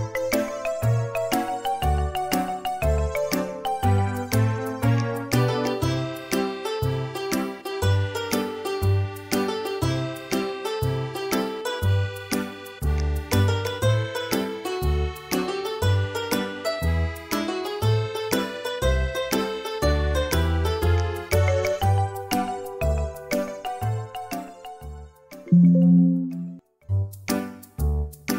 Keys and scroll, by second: 1.7 Delete, 8.0-9.9 typing, 18.4 Return, 18.4 typing.